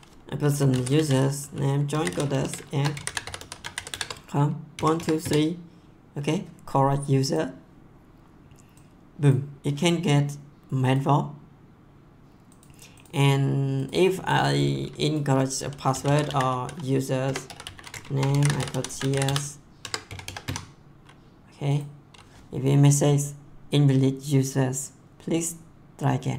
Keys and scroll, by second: 0.3-5.7 typing, 15.7-20.9 typing.